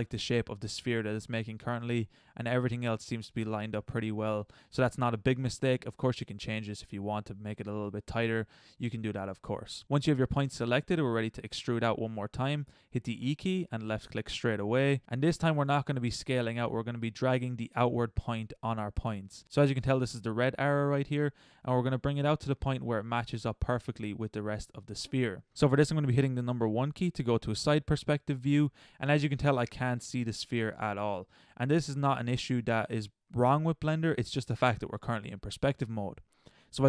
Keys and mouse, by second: 0.1 middle click, 1.2 middle click, 1.7 middle click, 9.7 middle click, 10.5 middle click, 11.0 middle click, 13.1 e, 16.4-17.7 middle drag, 21.6-23.5 middle drag, 26.5 KP_1, 27.8 KP_5, 29.6 middle click.